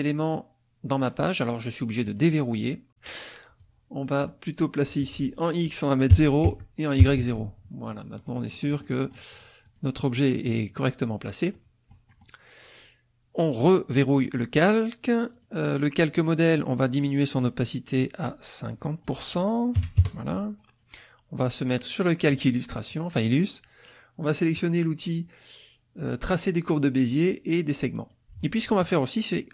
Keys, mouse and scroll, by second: 2.1 click, 3.6 click, 4.9 click, 6.1 KP_0, 6.5 Tab, 7.0 KP_0, 7.2 Tab, 8.2-9.3 drag, 9.3 click, 11.5 click, 13.9 click, 15.3 click, 18.7 click, 19.8 KP_5, 20.0 KP_Enter, 21.8 click, 27.9 click.